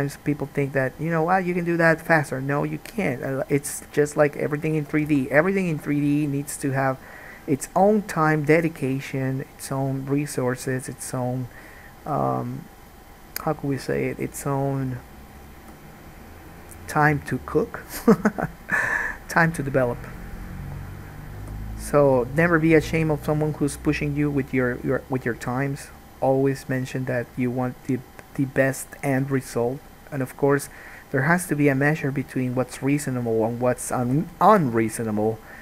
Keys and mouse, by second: 1.3-11.6 ctrl+drag, 3.2 g, 5.2 alt+a, 10.8 middle click, 10.8 right click, 11.6-21.6 right drag, 12.2 g, 13.4 click, 13.9 g, 15.8 g, 21.1 click, 21.6-24.6 drag, 21.6 g, 24.6 middle click, 25.6-28.6 drag, 25.6 g, 28.6 middle click, 29.4-33.4 drag, 29.4 g, 32.7 alt+a, 33.4 middle click, 34.2-35.6 drag, 34.2 g.